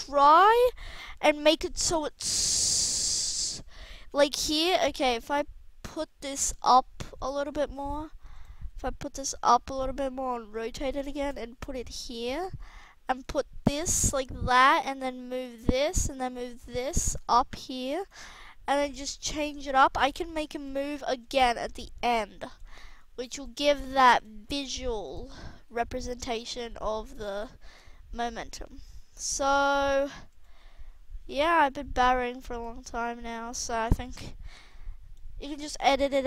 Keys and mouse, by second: 0.6-2.4 drag, 2.7-3.9 drag, 5.1 h, 6.5 g, 7.5 ctrl+z, 8.5 g, 9.6 r, 11.0 shift+d, 13.5 r, 14.4-15.9 drag, 16.1 g, 18.0 g, 20.6 g, 21.4 r, 23.7 g, 24.3 r, 27.4 g, 28.6 g, 30.5 g, 35.9 alt+a.